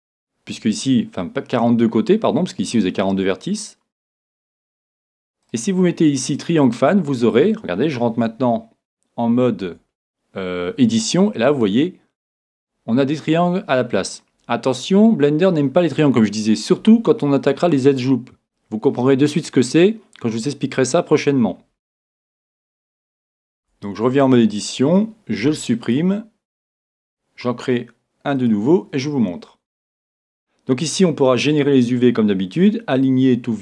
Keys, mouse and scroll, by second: 5.4-7.3 drag, 9.6 Tab, 11.3 middle click, 11.3-12.1 scroll up 1, 12.1-13.1 scroll up 1, 13.1-14.8 middle drag, 13.3-14.0 scroll down 1, 15.5-17.7 middle drag, 15.5-15.8 scroll down 1, 17.7-18.1 scroll down 2, 18.3-23.6 middle drag, 23.6 Tab, 25.4 x, 27.0 shift+a, 33.0-33.6 drag.